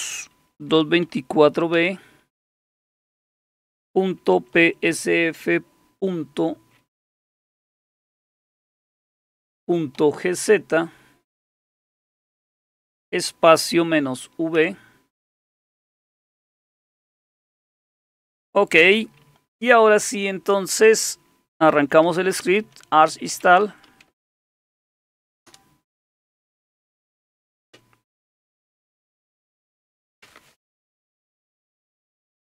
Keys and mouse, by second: 0.6-1.7 typing, 3.7-5.4 typing, 7.0-10.0 typing, 13.5 typing, 14.6 typing, 15.9 typing, 21.5-24.6 typing, 25.5 Return.